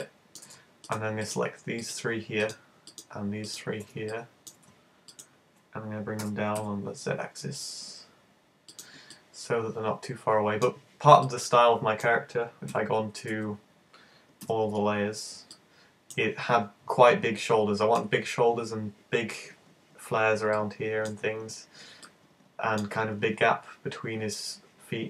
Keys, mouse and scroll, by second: 0.1 middle click, 0.9 shift+right click, 1.3 shift+right click, 1.9 shift+right click, 2.5 shift+right click, 2.7 shift+right click, 2.9 shift+right click, 3.5 shift+right click, 3.6 shift+right click, 4.2 middle click, 5.1 shift+right click, 6.3 shift+super+g, 8.8 click, 9.1 middle click, 11.3 middle click, 12.7 z, 13.3 z, 14.5 `, 15.0 scroll down 4, 15.5 middle click, 17.5 middle click, 20.6 middle click, 21.3-21.9 scroll down 5, 22.1 middle click.